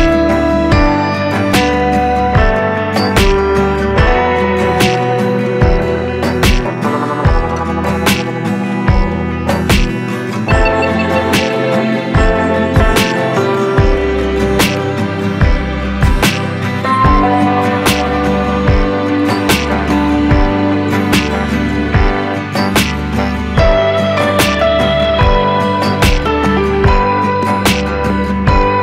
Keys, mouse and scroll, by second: 7.7-18.2 drag, 18.2 click, 18.2-26.2 drag, 26.2 click, 28.1 ctrl+alt+scroll up 1.